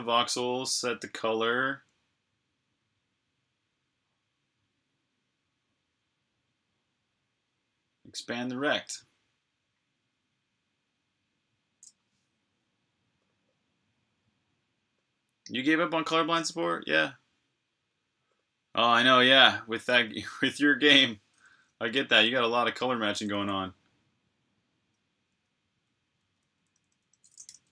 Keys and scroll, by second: 21.9 j, 25.6-27.7 typing.